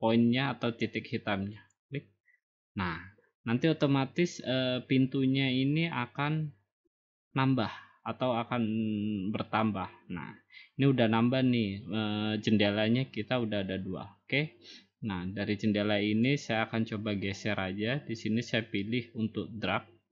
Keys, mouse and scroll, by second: 1.7-2.8 drag, 16.4 click.